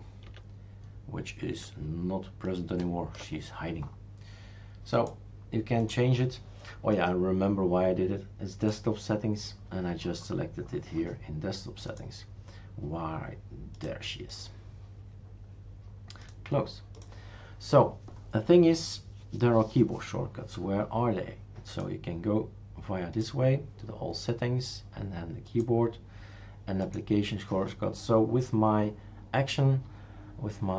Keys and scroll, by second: 0.3 alt+Left, 1.5 alt+Left.